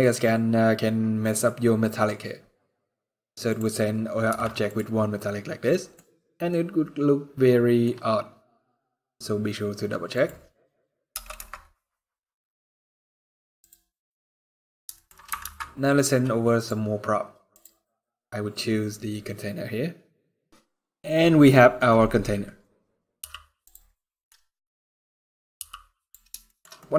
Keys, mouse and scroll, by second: 13.4 click, 13.4-13.9 scroll down 6, 13.9 middle click, 14.8 scroll up 1, 15.4 ctrl+s, 21.6 middle click, 22.9 g, 24.1 middle click, 24.1-24.5 scroll down 4, 24.6 middle click, 25.0 scroll up 2, 25.3 g, 26.1 shift+scroll down 1, 26.2 shift+middle click, 26.5 middle click, 26.5 scroll up 1.